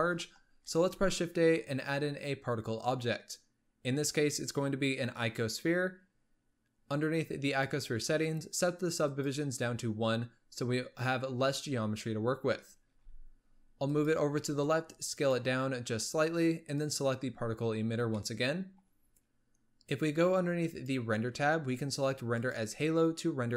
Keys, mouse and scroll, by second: 0.6 shift+a, 7.3-12.0 drag, 12.7 g, 14.3 s, 16.6 click, 18.1-20.6 shift+middle drag, 20.6-23.5 drag.